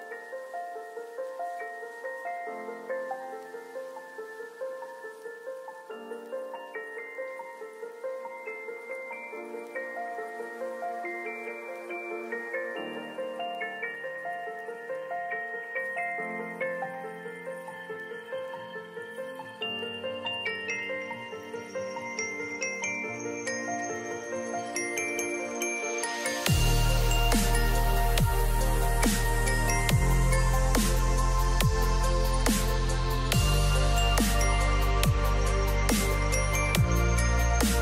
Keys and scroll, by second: 29.6 ctrl+g, 33.6 ctrl+z.